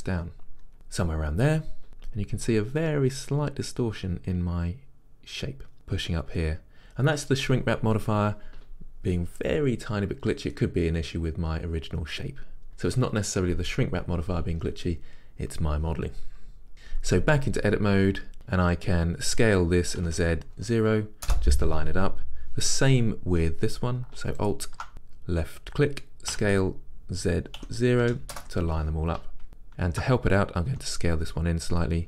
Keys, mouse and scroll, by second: 5.7 Tab, 19.5 s, 21.4 Return, 24.6 alt+click, 26.5 s, 28.5 Return, 29.6 alt+click, 30.8 s.